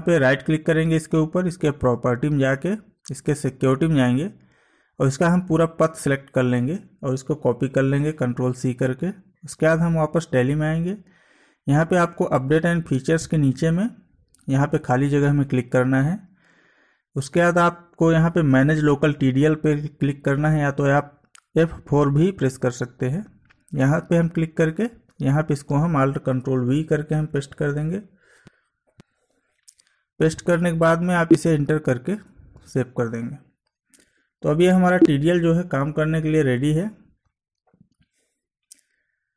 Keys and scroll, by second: 7.6 ctrl+c, 28.8 ctrl+alt+v, 34.4 Escape, 38.9 Escape.